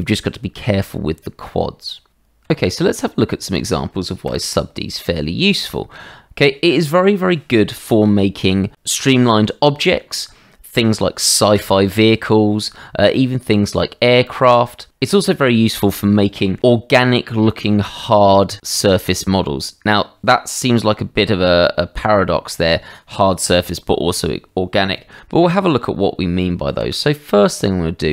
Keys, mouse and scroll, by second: 2.5 Tab, 3.4 click, 4.3 Delete, 5.6-5.9 drag, 14.3 click, 26.7 shift+a.